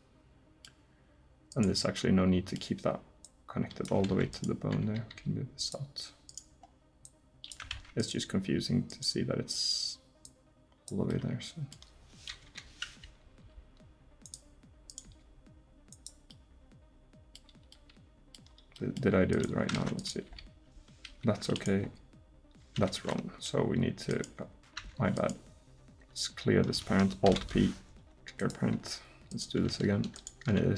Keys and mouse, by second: 1.5 right click, 2.0 middle click, 2.2-3.9 middle drag, 4.1 ctrl+z, 4.4 right click, 5.2 g, 7.8 ctrl+z, 11.3 middle click, 12.5 KP_7, 13.4 g, 14.9 click, 15.1 g, 15.9 click, 18.5 middle click, 19.8 ctrl+Tab, 20.3 r, 21.9 r, 24.8 Tab, 27.3 alt+p.